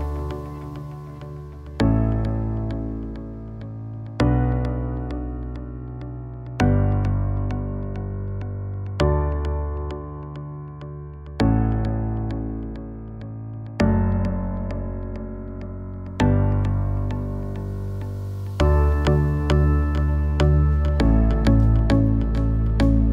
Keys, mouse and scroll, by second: 0.0-3.4 typing, 4.2 click, 7.3 Tab, 8.1-10.3 drag, 12.5 middle click, 13.4 middle click, 17.1 ctrl+shift+a, 20.1 middle click, 21.0 KP_0, 22.9 right drag.